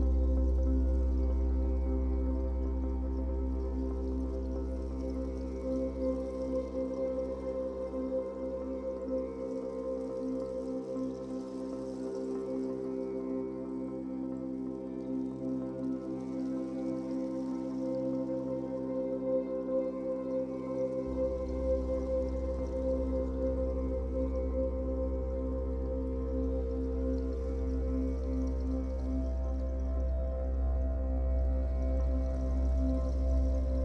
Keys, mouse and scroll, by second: 0.7-8.6 drag, 8.6-9.7 middle drag, 9.7-17.8 drag, 17.8-19.1 middle drag, 19.1-24.6 drag, 24.6-26.3 middle drag, 24.9 scroll down 2, 25.3-25.6 scroll up 2, 26.3-30.9 drag, 30.9-32.3 middle drag, 31.3 scroll down 2, 32.3-33.8 drag.